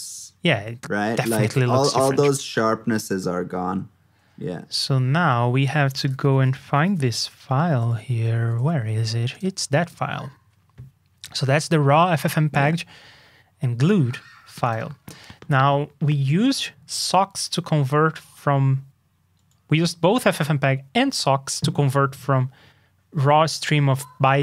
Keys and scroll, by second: 8.3 ctrl+alt+super+s.